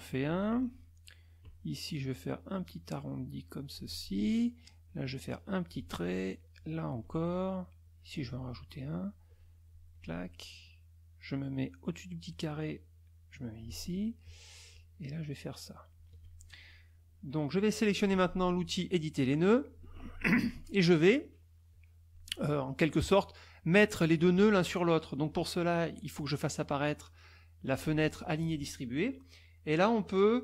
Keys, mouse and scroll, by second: 2.1 shift+click, 3.3 shift+click, 4.8-5.9 shift+drag, 6.6 shift+click, 7.8 shift+click, 9.3 shift+click, 12.2-13.8 shift+drag, 14.7-16.2 shift+drag, 19.4 click, 21.7 click, 27.8 click.